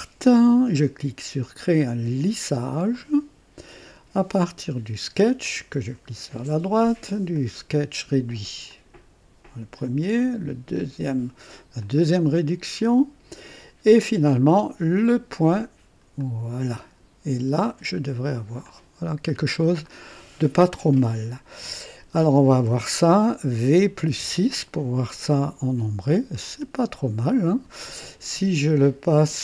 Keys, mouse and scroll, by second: 2.9 click, 4.4 click, 5.4 click, 7.3 click, 8.7 click, 10.1 click, 11.8 click, 14.9 click, 16.2 click, 17.7 click, 18.7-19.8 drag, 19.9-20.6 right drag, 24.0 v, 24.2 KP_6, 25.4-27.6 drag.